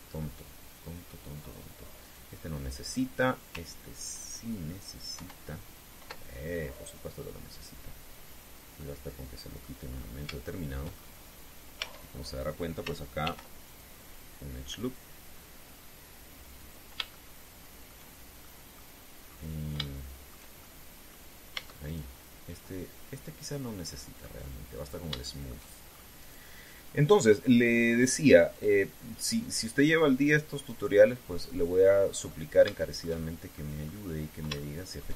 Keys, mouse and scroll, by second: 2.7 right click, 5.9 ctrl+2, 9.5-10.5 middle drag, 10.6 scroll up 2, 11.2 shift+middle click, 11.7-12.1 shift+scroll up 3, 12.5 Tab, 14.0 ctrl+r, 14.4 ctrl+click, 17.3 click, 17.9 shift+middle click, 19.1 shift+middle click, 20.0 scroll down 2, 20.5 shift+middle click, 21.3 shift+middle click, 22.3 Tab, 22.6 right click, 23.4-25.1 middle drag, 25.6 scroll down 1, 25.9 shift+middle click, 26.7 shift+scroll up 1, 26.9 right click, 28.6 click, 29.3 click, 30.0 right click, 31.3 right click, 32.2-33.2 middle drag, 33.5 shift+middle click, 34.6 shift+scroll up 3.